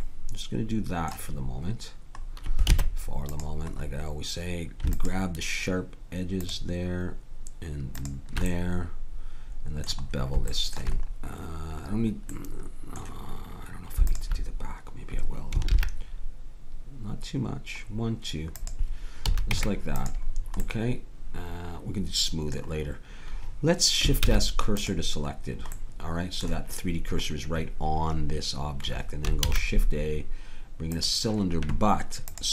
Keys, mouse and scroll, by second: 2.7 ctrl+Tab, 5.0-9.8 drag, 9.8 middle click, 14.1-15.9 drag, 15.7 ctrl+b, 19.3 a, 19.5 Tab, 20.6-21.7 scroll up 1, 24.2 shift+s, 29.4 shift+a.